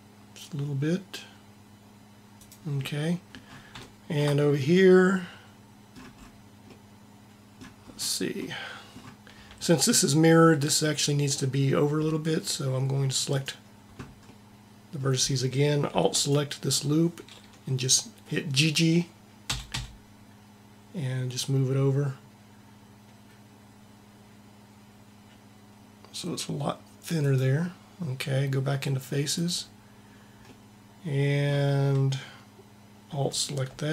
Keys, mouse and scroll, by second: 13.2-15.1 drag, 19.4 g, 29.3 click.